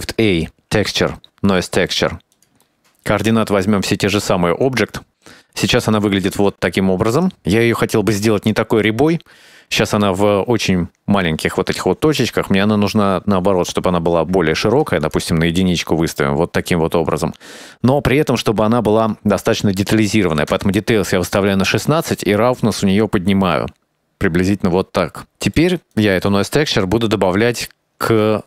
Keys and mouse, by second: 2.7 middle click, 4.8-6.0 drag, 6.3 ctrl+shift+click, 7.6 middle click, 8.2 middle click, 10.0 click, 10.5 shift+middle click, 14.8-15.4 drag, 19.6-25.4 drag, 26.9 middle click, 27.4 middle click, 27.7 click, 28.1 middle click.